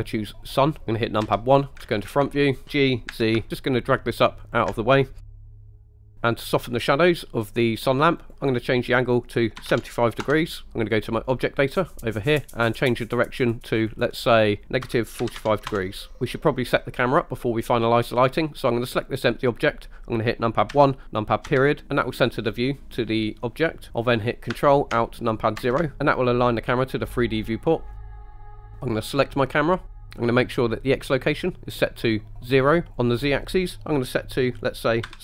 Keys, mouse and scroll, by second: 1.3 KP_1, 2.0 scroll down 2, 2.4 shift+middle drag, 2.6 g, 3.1 z, 4.5 ctrl+click, 5.2 middle drag, 5.5 scroll up 2, 5.6 shift+middle drag, 8.2-10.3 drag, 12.3-15.7 drag, 18.9 click, 20.8 KP_1, 21.5 KP_Decimal, 25.6 ctrl+alt+KP_0, 29.0 click, 33.0-35.2 drag.